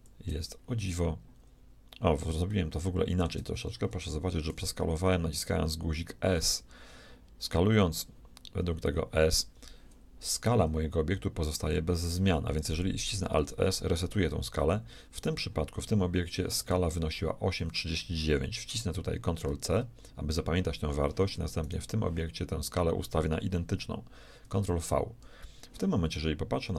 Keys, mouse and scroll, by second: 0.5 middle click, 3.9 middle click, 4.5 s, 13.3 alt+s, 15.1-17.1 right drag, 19.4 ctrl+c, 21.6-23.7 right drag, 24.4 ctrl+v, 26.6-26.7 middle drag.